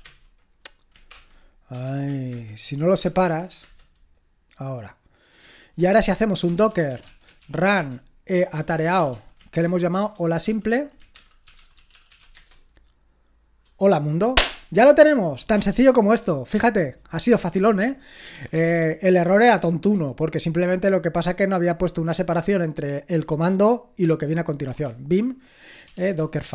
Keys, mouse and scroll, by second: 0.0-3.0 typing, 3.0 Return, 6.1-12.7 typing, 18.0-19.0 typing, 24.6 Tab, 25.6-26.5 typing.